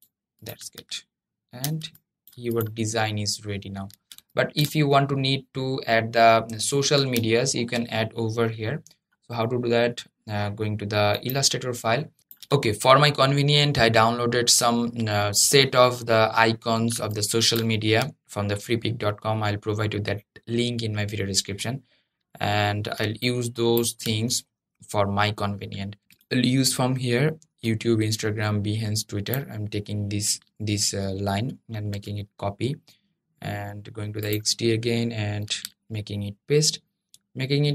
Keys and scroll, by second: 31.7 super+c, 35.2 super+v.